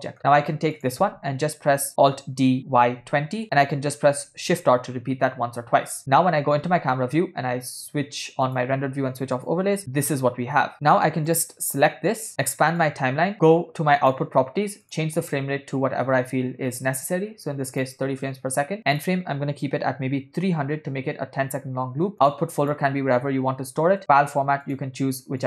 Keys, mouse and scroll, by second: 1.0 click, 2.4 alt+d, 4.3 shift+r, 5.4 shift+r, 6.0 KP_0, 8.6 click, 9.5 click, 11.3-11.6 drag, 12.8 click, 14.0 click, 14.8-18.1 drag, 18.9-21.2 drag, 21.1 0, 22.1 click, 22.7-24.0 drag, 24.0 /, 25.2 click.